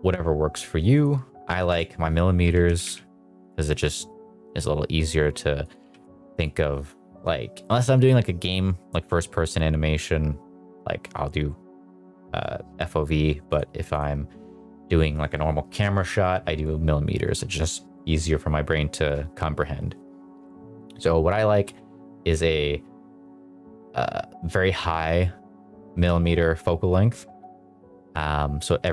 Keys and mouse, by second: 1.0 click, 2.4 g, 2.6 z, 2.8 z, 5.6 click, 5.8 g, 6.0 z, 6.4 click, 13.5 click.